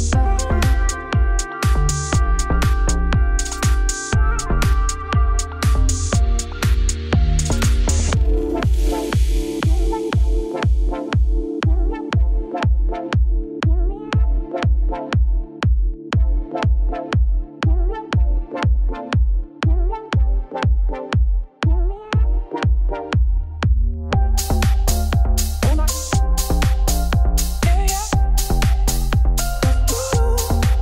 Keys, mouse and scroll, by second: 0.6 ctrl+r, 1.2 ctrl+e, 1.7 ctrl+e, 2.0 ctrl+r, 2.7 ctrl+z, 2.8 ctrl+z, 3.3 ctrl+r, 3.9 ctrl+r, 4.4-6.5 typing, 4.5 shift+click, 5.3 ctrl+z, 5.5 shift+click, 6.2 click, 8.2-9.4 middle drag, 9.6 scroll down 1, 9.8-10.9 middle drag, 10.9-11.5 scroll up 1, 11.5 Tab, 13.1 middle click, 13.3 shift+click, 13.5 middle click, 13.7 s, 15.1-16.5 middle drag, 16.5 click, 16.8 Tab, 17.1 1, 17.2 click, 17.4 shift+s, 17.6 Tab, 17.9 ., 18.4 s, 19.7 scroll down 2, 19.8-21.4 middle drag, 21.4-22.4 scroll up 1, 22.4 ctrl+a, 23.3 click, 23.4 ctrl+a, 23.9 shift+s, 26.0-27.2 drag, 27.2 Tab, 27.3 3, 27.3 shift+click, 27.8 shift+d, 28.4 p.